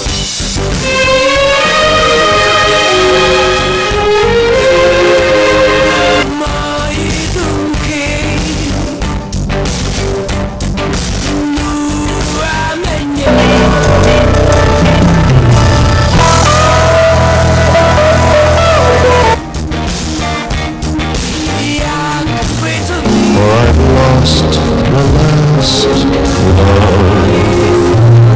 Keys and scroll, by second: 6.4 Page_Down, 19.4 Page_Down.